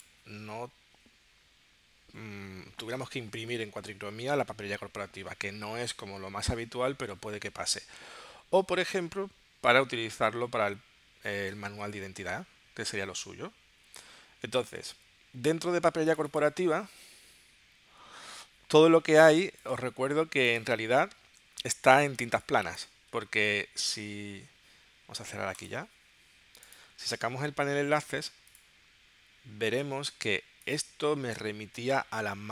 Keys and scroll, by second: 19.2 space, 22.3 space.